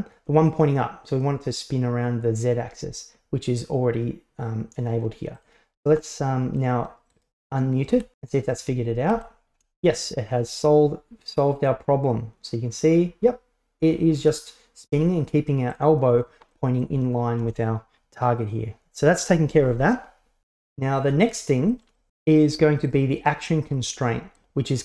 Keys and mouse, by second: 5.4 click, 6.0-6.6 middle drag, 7.2 right click, 9.2 g, 16.7 middle click, 19.7 alt+r, 19.7 alt+g, 20.0 right click, 20.5 shift+middle click, 20.8-21.6 middle drag, 22.9 right click, 23.8-24.4 middle drag.